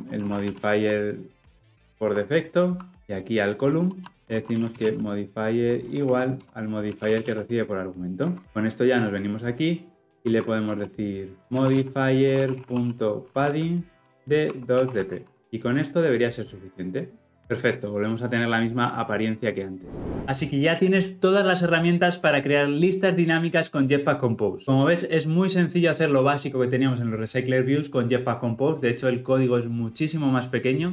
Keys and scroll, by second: 6.4 Return, 8.4 ctrl+alt+o, 14.0 Return, 16.2 Return.